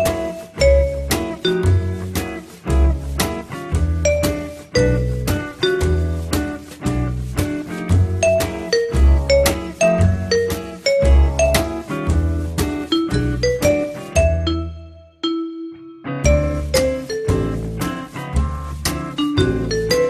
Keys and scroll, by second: 4.8-5.6 typing, 6.1 Return, 14.0 F3.